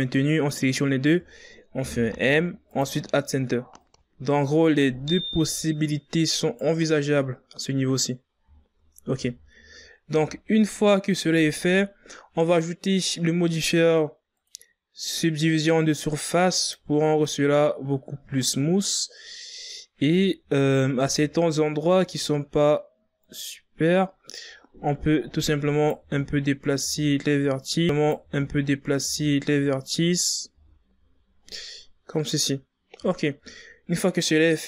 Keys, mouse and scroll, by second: 2.5 m, 4.6 right click, 6.3 right click, 8.2 scroll down 3, 8.9 scroll down 4, 9.4 shift+scroll up 1, 10.0 z, 10.9 Tab, 15.1-18.1 drag, 20.5 scroll up 1, 20.9 shift+scroll down 3, 21.3-21.7 scroll up 2, 21.7 Tab, 22.7-23.1 ctrl+scroll up 4, 24.0 right click, 26.7 z, 27.1 scroll down 4, 27.6 Tab, 28.5 scroll down 5, 29.1 a, 29.5-29.9 scroll down 3, 29.9 scroll up 3, 30.7 right click, 31.2-31.8 scroll down 5, 33.5-34.6 drag.